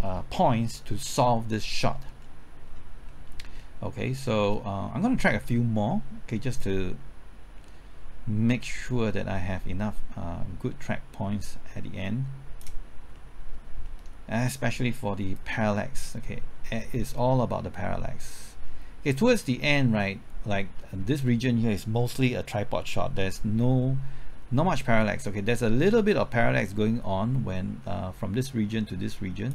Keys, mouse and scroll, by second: 1.9-2.7 scroll down 1, 2.7-3.1 scroll up 1, 3.1 middle click, 3.3 scroll up 1, 3.6 middle click, 4.2-4.9 scroll down 1, 4.9-5.4 scroll up 1, 5.4-6.6 scroll down 1, 6.6-13.1 drag, 13.2 middle click, 13.5-13.9 scroll up 1, 13.9 middle click, 14.1-15.4 scroll up 1, 15.4-29.5 drag.